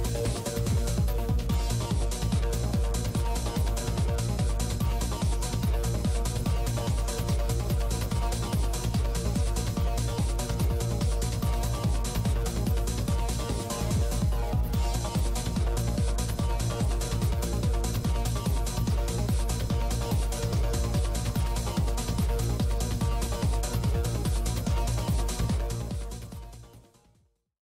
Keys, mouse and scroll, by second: 0.1 f, 0.4-2.5 drag, 1.3 f, 1.3 shift+c, 2.7 f, 3.9 f, 5.8 click, 6.5 i, 6.5 f, 7.1-9.7 drag, 7.7 shift+f, 9.6 middle click, 9.8-11.6 middle drag, 13.0-14.2 drag, 14.2 f, 16.9 i, 16.9 f, 17.3-20.2 drag, 18.1 middle click, 18.8 middle click, 20.2-23.1 middle drag, 20.5 click.